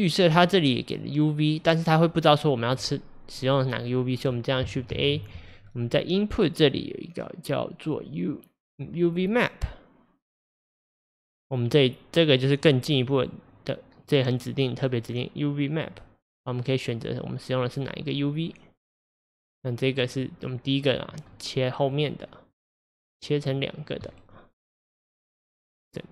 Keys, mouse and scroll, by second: 12.6-15.9 drag, 16.8-19.2 drag, 19.2-23.6 middle drag, 23.6 click, 24.1-26.1 middle drag.